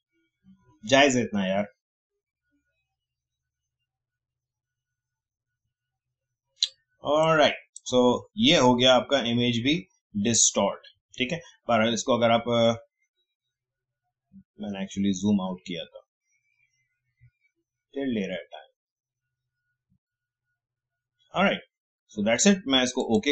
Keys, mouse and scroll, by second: 7.2-9.2 drag, 9.2-9.7 alt+scroll down 1, 23.0 click.